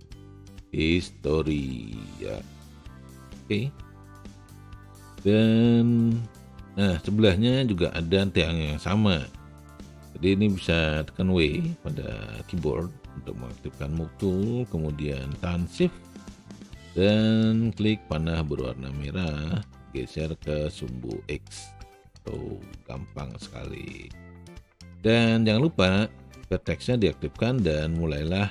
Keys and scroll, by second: 11.5 w.